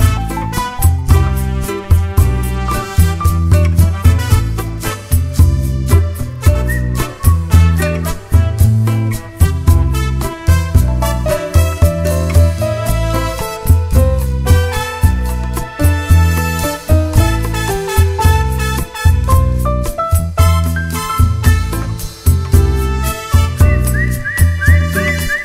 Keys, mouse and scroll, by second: 4.2 `, 5.1 click, 5.5 ctrl+x, 6.3 click, 7.3 ctrl+r, 8.4 1, 9.0 2, 9.2 click, 10.1 g, 11.7 ctrl+r, 13.9 scroll down 2, 14.1 `, 15.5 alt+a, 15.7-16.0 scroll up 2, 16.0 `, 17.2-17.5 scroll up 2, 17.5-18.3 scroll down 4, 17.8 Tab, 18.7 `, 21.1 `, 21.7 scroll up 1, 21.9 `, 24.3-24.7 scroll down 2.